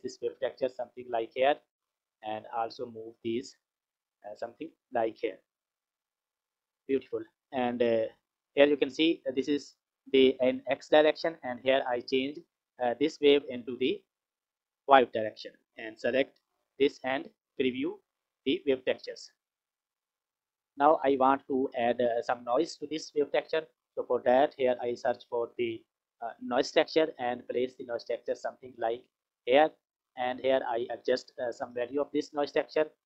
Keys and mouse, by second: 0.3 click, 1.3-1.7 drag, 2.5-3.6 drag, 4.6 click, 6.9 click, 8.0 click, 13.0-14.5 drag, 15.1 click, 17.0 ctrl+shift+click, 20.2 F6, 23.4 click, 24.8 shift+a, 29.2 click, 30.7 click, 32.7 click.